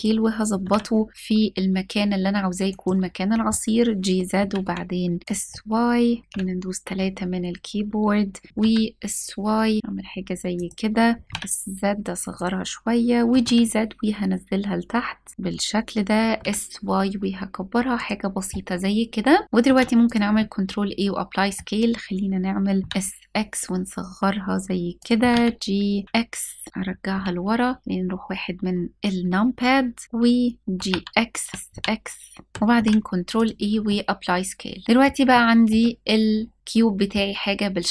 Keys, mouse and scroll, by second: 0.1 g, 0.2 z, 2.3 click, 4.0 s, 4.2 y, 5.2-6.0 middle drag, 5.2 click, 5.9 scroll down 1, 6.2 KP_3, 6.8-7.4 scroll up 2, 7.7 scroll down 1, 8.3 s, 8.5 t, 10.2 click, 11.1 s, 11.2 z, 12.0 click, 12.9 g, 13.0 z, 15.3 click, 15.8 s, 16.0 y, 17.6 click, 19.4 ctrl+a, 20.0-21.2 middle drag, 22.5 s, 22.7 x, 24.6 click, 24.8 g, 24.9 y, 26.0 x, 26.7 click, 26.7 KP_1, 30.6-32.5 typing, 31.5 click, 32.5 ctrl+a, 32.5 click, 33.5-34.8 middle drag, 35.0-35.4 shift+middle drag, 36.6 middle click.